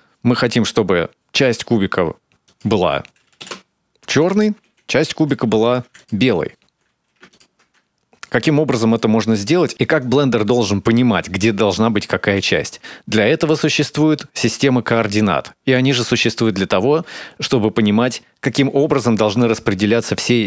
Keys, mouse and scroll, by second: 3.4 click, 5.3 click, 5.6 shift+d, 6.6 click, 8.3 ctrl+shift+click, 9.7 click.